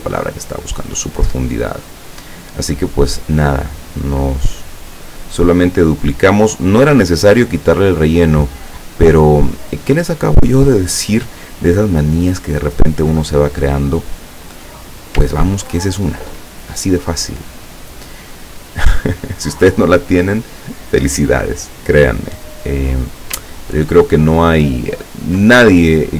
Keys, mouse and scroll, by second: 0.3-3.3 drag, 4.8-7.4 drag, 8.3-10.6 drag, 11.7-12.9 drag, 13.8 click, 15.5-16.2 ctrl+scroll down 2, 16.6 ctrl+click, 17.9 click, 18.7 click, 23.9 ctrl+scroll up 2, 24.9 ctrl+scroll up 1, 25.6 ctrl+middle click.